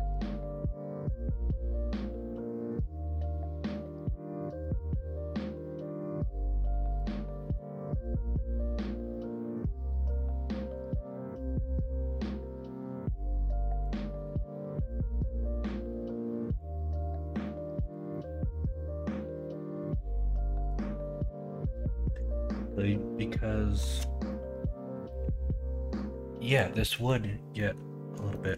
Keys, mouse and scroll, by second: 14.3-16.5 middle drag, 16.8 middle click, 17.3 Tab, 18.1 middle click, 20.3-20.6 middle drag, 21.5 middle click, 25.1 middle click, 26.9 middle click, 27.5 middle click, 28.3 shift+middle drag.